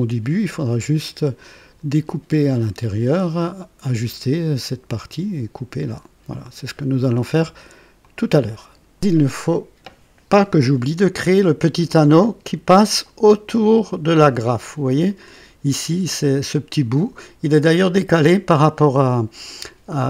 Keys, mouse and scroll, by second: 1.0-4.3 drag, 8.0 click, 15.0 click.